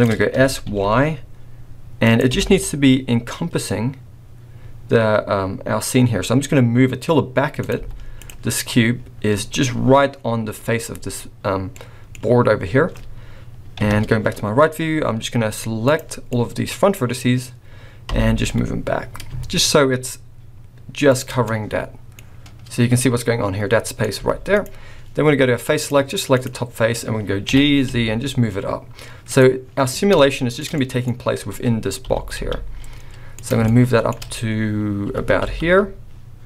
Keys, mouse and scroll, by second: 0.3 s, 2.3 g, 7.7 z, 8.4 scroll up 3, 10.1 scroll down 4, 11.0-11.7 scroll down 2, 11.8 middle click, 13.8 KP_3, 14.3-14.7 scroll up 3, 15.8 click, 16.3 click, 18.1 g, 21.4 middle click, 22.2-22.8 scroll down 4, 22.9 middle click, 24.2 z, 25.8 click, 26.3 click, 27.0 scroll down 3, 27.4 g, 29.9 scroll down 2, 30.1 shift+middle click, 30.7 middle click, 31.0-32.0 scroll up 3, 32.0 g, 33.6 shift+middle click, 35.0 g.